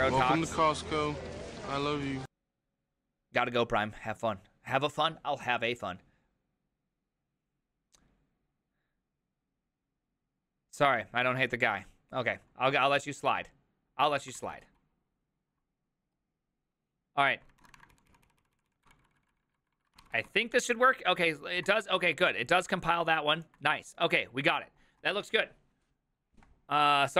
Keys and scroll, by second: 16.6 alt+{, 17.9 ctrl+a, 17.9 ctrl+u, 17.9 [, 18.1 ctrl+u, 18.3 ctrl+u, 18.4 ctrl+u, 18.9 ctrl+u, 18.9 ctrl+d, 19.0 ctrl+d, 19.1-19.7 ctrl+d, 20.0 ctrl+c, 20.1 ctrl+c, 22.4 ctrl+c.